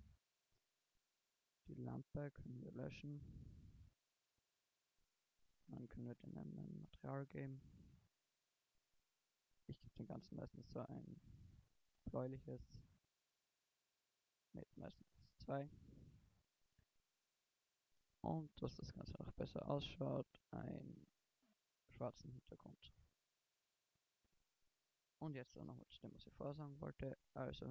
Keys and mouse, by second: 1.4 Delete, 8.2-9.8 drag, 11.4 drag, 13.2-14.6 drag.